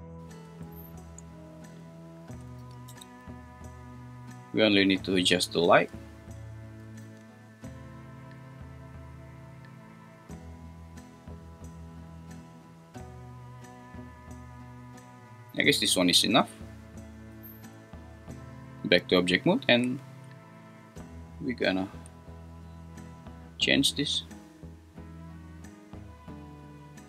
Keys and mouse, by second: 1.7 click, 2.5 g, 2.9 x, 5.1 click, 6.6 click, 7.0 g, 15.5 click, 17.3 Tab, 19.8 `, 21.9 g, 25.7 click.